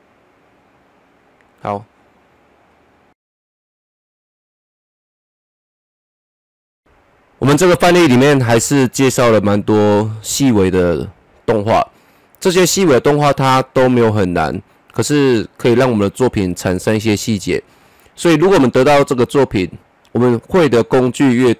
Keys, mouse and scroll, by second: 2.5 click, 2.5-7.4 drag, 7.4 space.